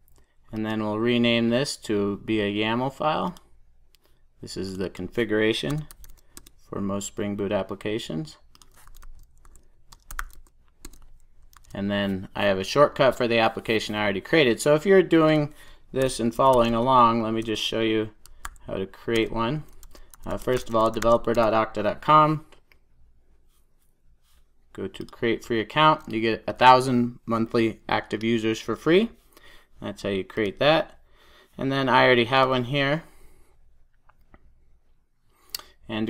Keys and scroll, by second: 3.5 shift+F6, 10.8 Return, 11.5 super+s.